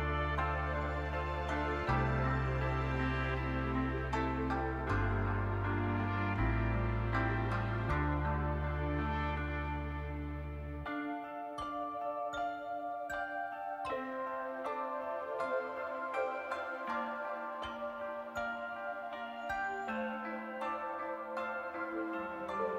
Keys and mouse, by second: 1.7 click, 1.9 middle click, 3.3 middle click, 4.2 middle click, 5.7 click, 6.5 click, 7.0 click, 7.9 shift+click, 8.2 click, 9.3 middle click, 9.6 middle click, 10.3 middle click, 11.4 middle click, 12.6 click, 13.1 middle click, 14.0 middle click, 14.8 middle click, 15.4 click, 15.6 middle click, 16.4 shift+click, 17.3 click, 17.7 click, 17.9 click, 18.5 click, 18.7 click, 19.6 shift+click, 21.0 click, 21.8 click, 22.0 click, 22.3 middle click.